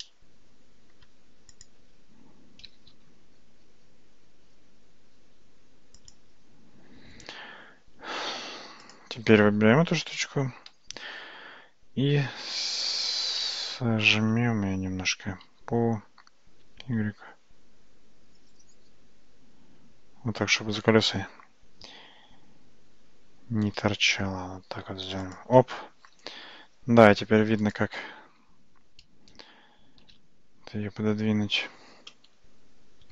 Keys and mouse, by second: 0.1-1.0 shift+middle drag, 1.6 click, 2.7 g, 10.7 s, 27.7 click, 30.2 alt+z, 32.5 shift+z.